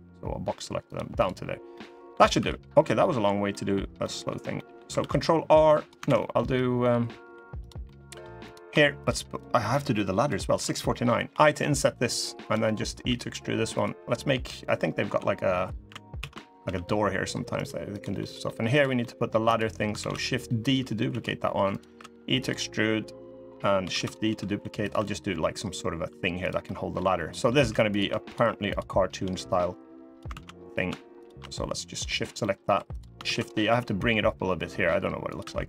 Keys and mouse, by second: 0.9 click, 1.4 middle click, 2.1 3, 2.7 middle click, 3.2 middle click, 3.7 middle click, 4.3 middle click, 4.7 ctrl+r, 5.8 ctrl+z, 5.9 middle click, 6.6 middle click, 7.3 click, 7.6 middle click, 8.1 click, 9.1 shift+click, 11.0 i, 12.4 middle click, 12.8 e, 14.8 h, 15.9 ctrl+z, 16.4 g, 17.6 click, 17.9 middle click, 18.5 click, 18.7 click, 18.7 middle click, 19.2 click, 19.7 shift+d, 20.8 s, 21.6 e, 23.6 shift+d, 24.0 s, 24.7 e, 26.4 middle click, 27.0 middle click, 27.3 3, 27.6 click, 29.2 click, 30.0 ctrl+z, 31.5 click, 32.1 middle click, 32.5 3, 32.7 click, 33.0 shift+d, 33.4 s, 35.1 e.